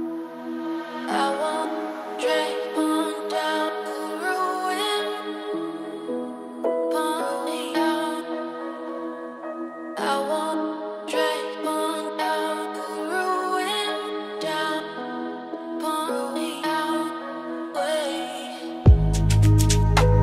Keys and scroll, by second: 13.4 ctrl+space, 17.3 ctrl+alt+s.